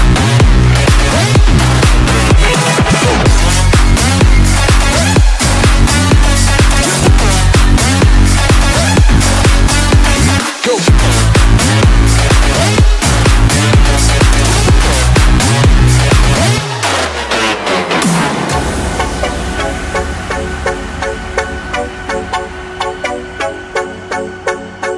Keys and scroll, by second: 4.1 ctrl+d, 14.8 space.